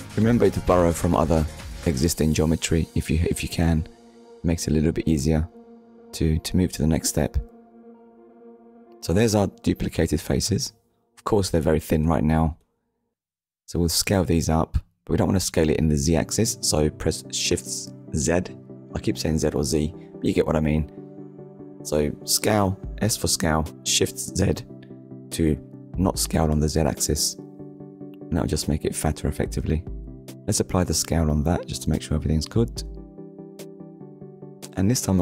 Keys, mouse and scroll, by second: 0.2 Return, 2.7 right click, 4.8 click, 6.4-6.8 scroll up 2, 7.7 middle click, 14.5 shift+z, 19.5 click, 20.2 shift+middle click, 20.7 middle click, 25.1 click, 29.0 ctrl+a, 29.8 click, 31.7 click.